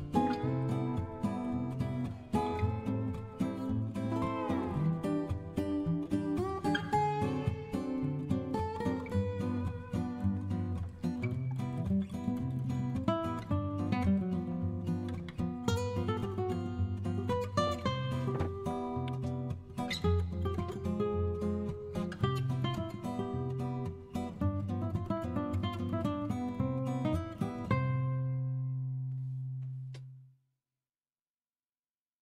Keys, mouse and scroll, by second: 21.8 Up, 24.8 End, 27.2-28.6 scroll down 1, 30.8-31.6 scroll down 1.